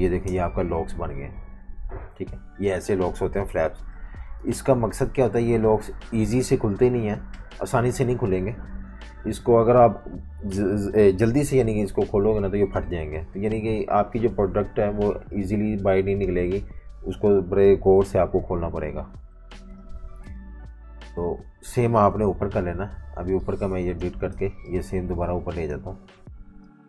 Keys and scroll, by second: 0.2 BackSpace, 3.5 super+-, 3.6 super+-, 4.4-5.6 typing, 8.8 F18, 19.3 F19, 19.8 super+-, 20.0 super+-, 20.8-22.0 typing, 22.2 super+-, 24.1 BackSpace.